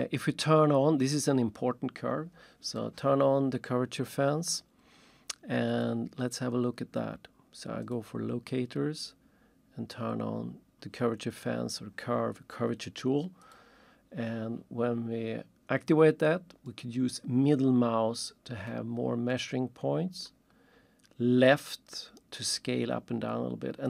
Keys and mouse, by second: 5.7 click, 7.9 click, 13.4 click, 16.7 middle click, 18.7 middle click, 20.2 middle click, 21.4 click.